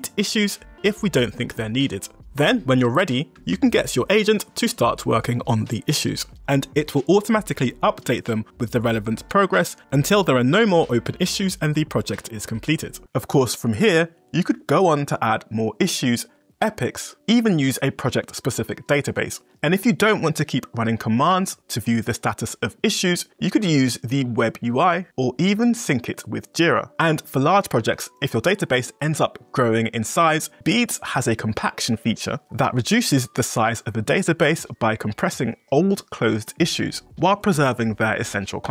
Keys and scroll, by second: 3.5 Return.